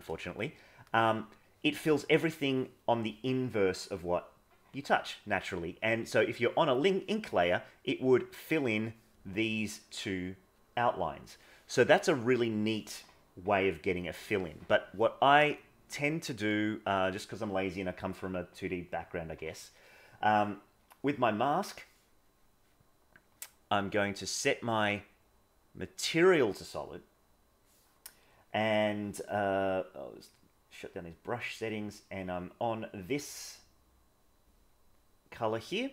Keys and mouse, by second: 0.1 ctrl+s, 6.0 middle click, 12.4 click, 15.6 click, 23.8-27.7 drag, 30.2 click.